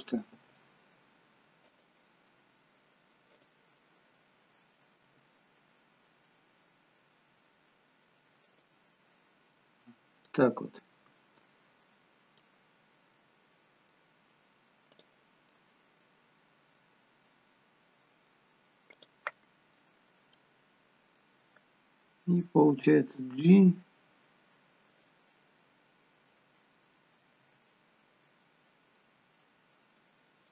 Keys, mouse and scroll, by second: 0.3 g, 3.2 click, 3.7 middle click, 4.9 g, 8.9 middle click, 9.7-10.2 scroll down 1, 10.2 middle click, 11.0-11.9 scroll down 2, 11.9-12.3 scroll down 4, 12.3 middle click, 14.8 click, 15.5 middle click, 16.7-17.8 scroll up 1, 17.8 middle click, 18.9 click, 19.8-20.3 scroll down 3, 20.3 middle click, 20.3 scroll up 1, 22.8 g, 25.2 middle click, 27.4 g.